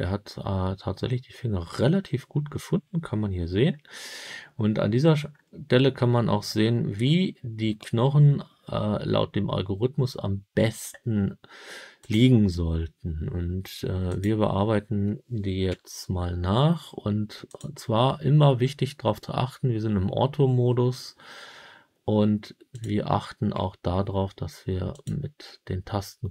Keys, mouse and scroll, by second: 5.2-8.3 scroll up 3, 11.9 click, 14.0 click, 15.6 g, 17.4 click, 22.6 click, 23.4 g, 24.8 click.